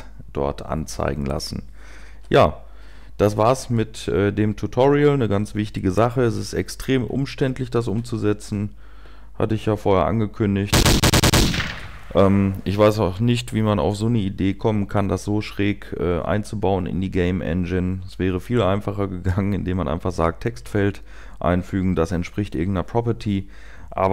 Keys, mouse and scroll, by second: 2.2 typing, 9.3 typing, 10.4-11.6 typing.